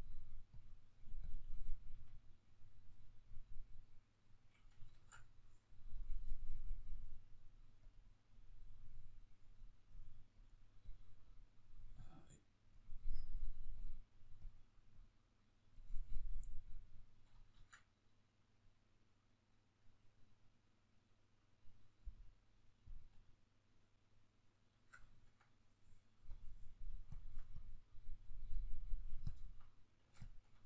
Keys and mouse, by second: 1.6 f, 2.5 click, 3.5-23.1 drag, 4.6 ctrl+z, 17.3 ctrl+z, 23.1-26.0 middle drag, 26.0-30.6 drag.